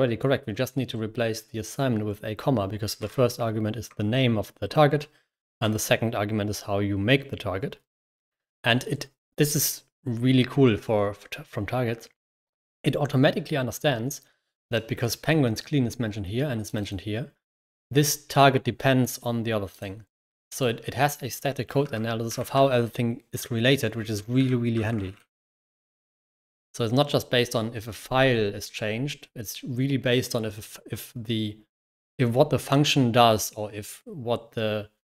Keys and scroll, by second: 2.9 *, 3.7 Escape, 5.3 shift+4, 5.4 Escape, 21.6-22.9 typing, 24.8-25.6 typing.